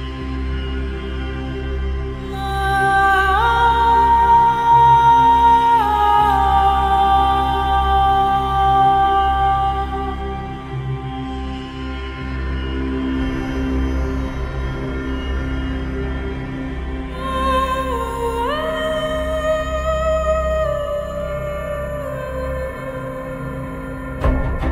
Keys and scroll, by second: 0.0-1.6 typing, 3.9 w, 5.2 3, 5.2 Return, 6.8-8.6 typing, 10.9 t, 11.0 F3, 16.8-17.9 typing, 19.1 alt+Tab, 19.2-19.9 typing, 20.1 Right, 21.0 Right, 21.1 Right, 21.2 Right, 21.3 Right, 22.8 alt+Tab, 23.1 alt+Tab.